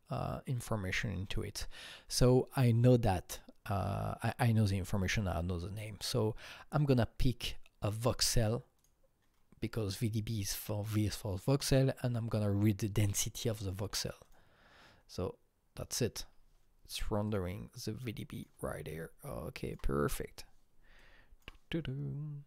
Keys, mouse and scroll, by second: 1.2 click, 2.1 click, 5.7 click, 8.7-11.0 drag, 14.2-17.2 click, 18.9-22.4 alt+drag.